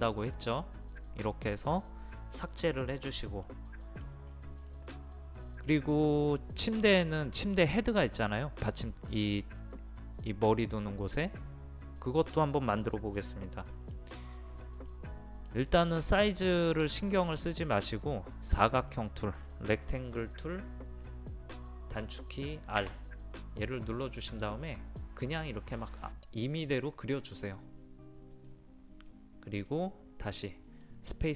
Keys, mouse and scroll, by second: 3.5 middle click, 4.3-4.6 scroll up 1, 4.7 middle click, 6.0-7.9 scroll up 1, 8.9-16.4 middle drag, 17.4-18.5 scroll up 1, 22.8 r, 24.8 click, 29.1-31.3 middle drag.